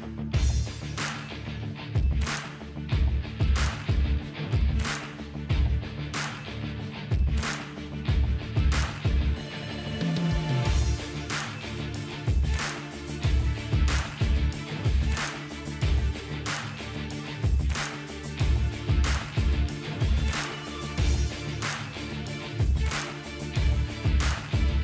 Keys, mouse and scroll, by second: 3.7-8.9 drag, 18.1-18.6 ctrl+scroll up 2, 19.2-19.6 ctrl+scroll up 1, 21.2-24.8 drag.